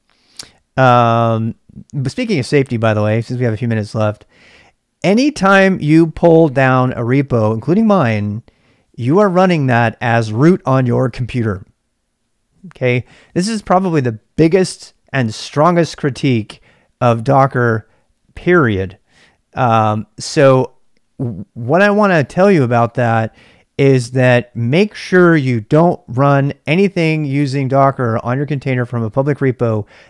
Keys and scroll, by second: 0.0-30.0 typing.